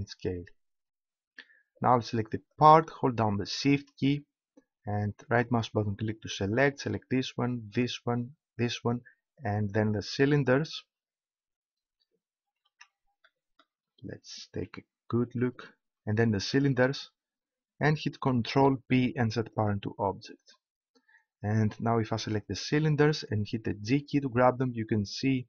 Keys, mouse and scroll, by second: 2.5-4.3 right drag, 4.3-5.3 middle drag, 6.4-12.2 right drag, 12.2 middle click, 12.7 ctrl+z, 16.1-18.5 right drag, 18.5 ctrl+p, 22.5-23.9 right drag, 23.9 g.